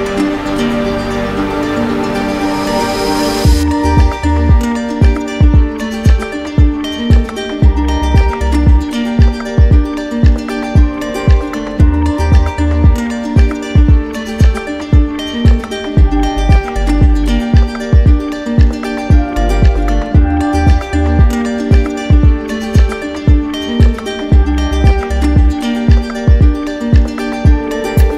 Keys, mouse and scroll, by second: 3.0 click, 6.5 click, 7.1 click, 7.7 alt+click, 8.5 alt+click, 11.0 z, 12.0-13.1 drag, 14.0-15.1 right drag, 16.8-17.9 drag, 20.0-21.0 drag, 21.5 click, 23.3 alt+click, 26.4 alt+click.